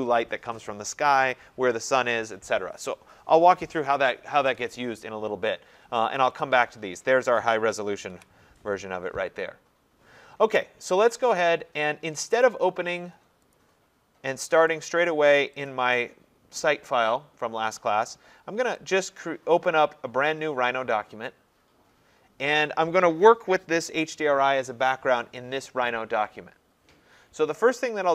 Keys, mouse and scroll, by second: 6.4 click, 8.1 ctrl+0, 11.0 click, 12.4 click, 13.5 click, 14.8 click, 15.7 click, 18.9 click, 19.9 click.